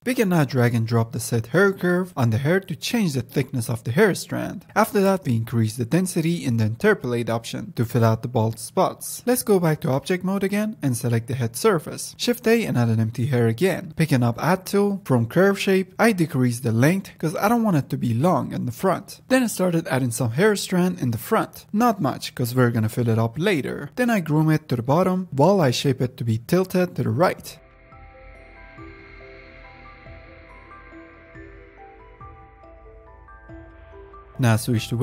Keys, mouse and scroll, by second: 0.4-1.5 drag, 2.1-3.1 scroll down 9, 4.1-8.5 drag, 8.8-9.8 middle drag, 9.8 z, 10.3 click, 10.8 ctrl+s, 11.9 shift+a, 13.7 ctrl+Tab, 14.4-16.7 drag, 19.0 click, 19.1-19.7 middle drag, 19.7-21.5 drag, 21.5 ctrl+z, 21.8 click, 21.9-22.5 middle drag, 22.5 a, 23.0 f, 23.5-24.4 drag, 24.4 middle click, 24.6 drag, 24.9 middle click, 25.1 click, 25.4 middle drag, 25.5 click, 26.2 middle click, 26.4 click, 26.9 middle click, 27.0 drag, 27.2 f, 27.4 middle drag, 27.5 drag, 27.8 middle click, 27.9-28.5 drag, 28.5 middle drag, 28.6-29.2 drag, 29.2 middle click, 29.7 drag, 30.0-30.3 middle drag, 30.3-30.6 drag, 30.6 middle click, 30.9 drag, 31.0 f, 31.1-32.5 drag, 32.5 ctrl+z, 32.6-33.7 drag, 33.7 scroll down 4, 33.8 middle drag, 34.0 click, 34.3-34.8 scroll up 1, 34.8 ctrl+Tab.